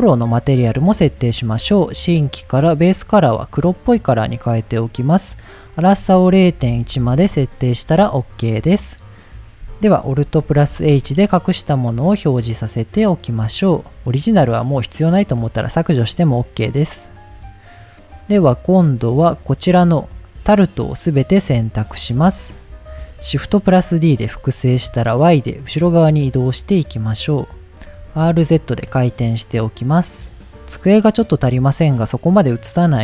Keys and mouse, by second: 1.5 click, 4.2 click, 5.7-7.9 drag, 10.9 alt+h, 12.5 click, 13.0-13.3 middle drag, 14.3 click, 15.4 click, 19.7-21.2 drag, 22.0 ctrl+click, 22.9 middle drag, 25.9 shift+d, 25.9 y, 28.0 r, 28.1 z, 30.2 click, 31.0-31.7 middle drag, 32.1-32.5 middle drag.